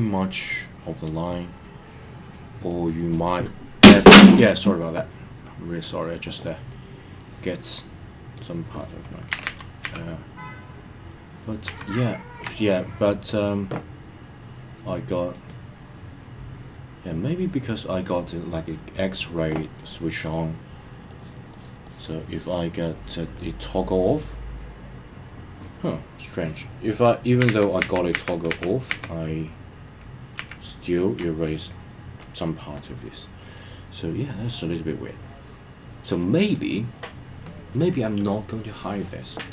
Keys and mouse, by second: 1.4 click, 5.4 middle click, 6.7-8.3 middle drag, 9.4 super+z, 9.8 super+z, 15.5 click, 18.6 middle click, 19.8 middle click, 21.1 click, 21.6 click, 21.9 click, 22.4 click, 22.8 click, 23.4-26.6 middle drag, 27.5 super+z, 27.8 super+z, 33.5-36.6 middle drag.